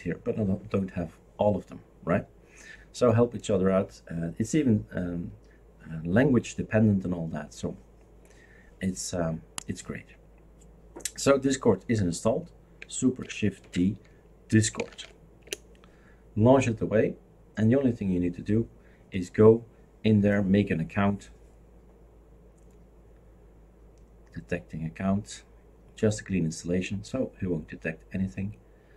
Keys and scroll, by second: 13.6 shift+super+d, 14.3-15.4 typing, 15.4 Return.